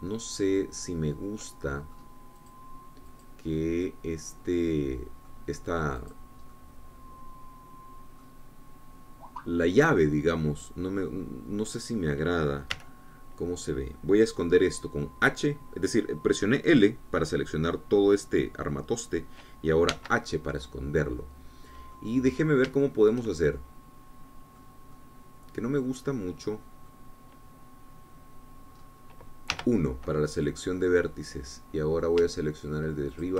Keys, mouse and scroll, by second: 3.6-4.9 drag, 4.9-7.3 middle drag, 7.3 click, 7.8-12.4 middle drag, 12.4-13.0 scroll down 1, 13.0 click, 14.0 l, 21.2 h, 21.8-23.4 drag, 23.6-24.0 scroll up 1, 24.1-28.3 shift+drag, 29.1-30.0 scroll down 1, 30.0-30.8 scroll up 1, 30.8 1, 31.6-33.3 drag.